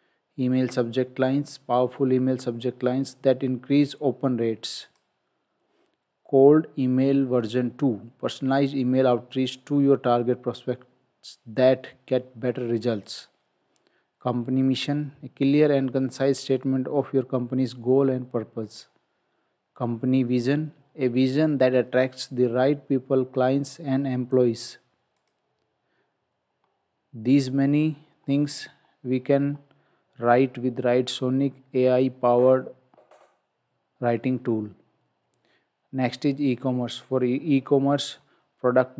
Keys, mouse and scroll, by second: 4.9 click, 13.1 click, 18.7 click, 27.5-28.2 scroll down 1, 29.9-31.2 scroll up 1.